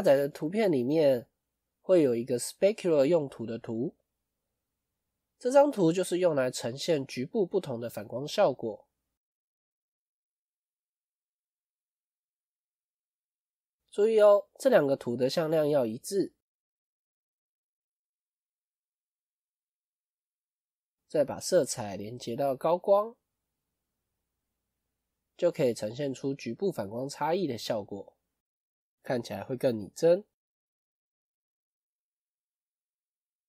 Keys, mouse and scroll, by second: 25.5 scroll up 1, 27.2-28.2 scroll up 2, 28.9 scroll down 1.